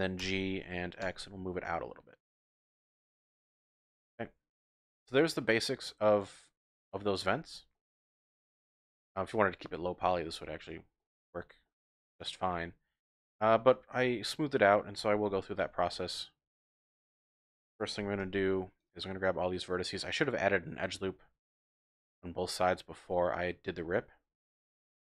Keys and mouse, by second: 0.2 g, 1.0 x, 3.8 click, 4.2 click, 4.6 middle click, 4.9 Tab, 5.4-6.3 middle drag, 6.3-7.1 drag, 7.3 Tab, 7.7 click, 8.8 Tab, 9.3 click, 10.3 Tab, 11.0 click, 11.4 Tab, 11.6 click, 12.4 Tab, 14.1 shift+click, 15.3 2, 18.0 1, 18.2 z, 18.9 click, 22.5 click, 23.3 middle click, 23.5 click, 23.7 z, 24.4 middle click, 24.6 click.